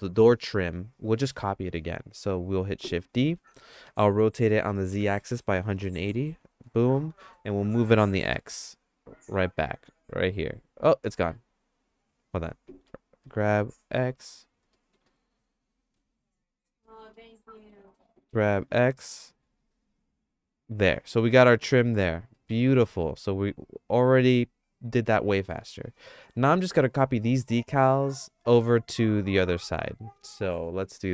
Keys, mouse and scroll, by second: 3.4 shift+d, 5.4 r, 7.7 g, 12.8 g, 14.7 middle click, 15.2 shift+middle click, 16.8 middle click, 17.2 shift+middle click, 17.6 shift+click, 18.2 g, 20.9 middle click, 21.9 middle click, 22.4-26.5 shift+middle drag, 26.8 middle click.